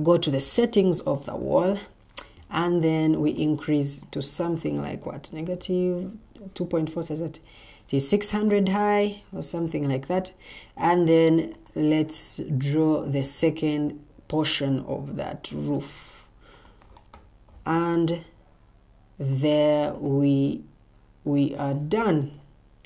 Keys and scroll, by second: 0.0 ctrl+t, 5.3 4, 13.5 Escape.